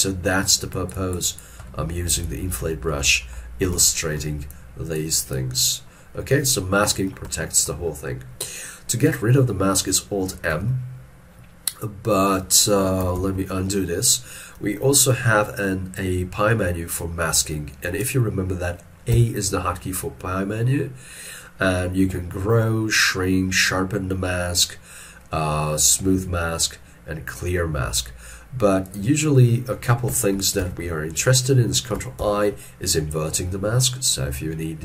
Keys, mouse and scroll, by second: 1.8 middle click, 2.9 middle click, 3.9 shift+scroll down 1, 6.0 scroll down 1, 7.4 shift+middle click, 10.6 alt+m, 13.2 ctrl+z, 19.2 a, 30.7 ctrl+z.